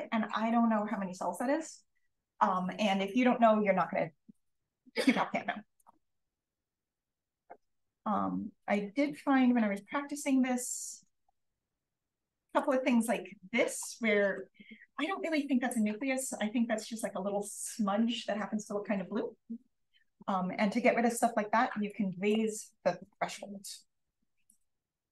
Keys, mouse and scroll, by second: 0.9-4.5 scroll up 1, 4.5-5.4 scroll up 1, 5.4 click, 5.4-6.0 scroll up 1, 6.0-7.3 scroll down 1, 6.5 click, 7.2 click, 7.8-8.1 drag, 8.4 drag, 9.0 drag, 9.8 click, 9.9-12.1 scroll down 1, 10.6 click, 12.1 scroll down 1, 12.1-13.1 scroll up 1, 12.5 click, 14.1 d, 15.9 d, 16.6 d, 21.8-22.9 drag, 22.9 BackSpace, 23.7 2, 24.4 click.